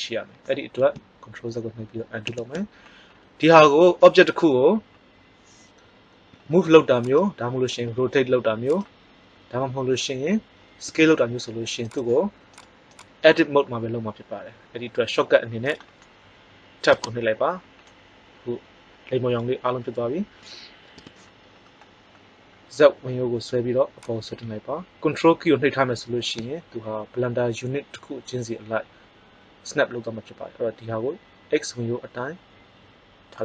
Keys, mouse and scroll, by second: 2.2 ctrl+z, 6.2 g, 7.8 r, 10.8 s, 16.8 Tab, 17.8-18.8 middle drag, 20.9 KP_1, 24.0 click.